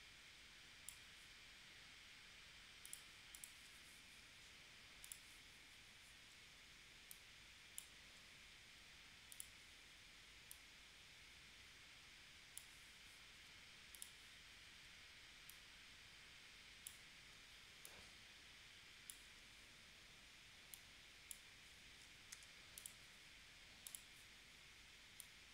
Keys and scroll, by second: 22.4 a.